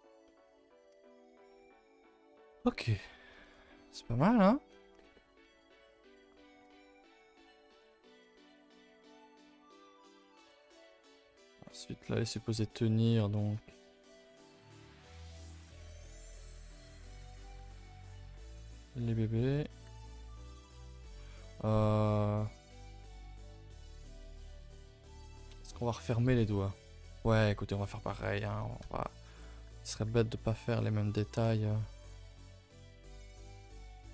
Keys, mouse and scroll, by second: 0.2-1.3 middle drag, 1.3-2.1 scroll down 2, 1.4 Tab, 1.6 a, 1.7 a, 2.1 ctrl+s, 2.1-3.5 ctrl+middle drag, 3.5 a, 3.7 a, 3.8 scroll down 1, 4.0 ctrl+s, 4.2-4.7 middle drag, 4.7 scroll up 2, 5.0-7.8 middle drag, 7.8-8.7 scroll up 4, 8.1 shift+middle click, 8.7-10.2 middle drag, 10.2-11.3 scroll up 2, 10.3 Tab, 11.3 click, 11.7 middle click, 12.6 click, 13.3 shift+click, 13.7 middle click, 14.5 g, 16.3 middle click, 16.9 g, 18.5 middle click, 19.0 g, 19.7 r, 20.3-22.0 middle drag, 22.0 scroll down 1, 25.3 scroll down 2, 25.5-27.5 middle drag, 27.5-28.2 scroll up 3, 27.8 middle click, 28.2 middle click, 29.2 scroll down 1, 29.4 middle click, 29.9 g, 30.7 r, 32.2 g, 33.0-34.1 middle drag.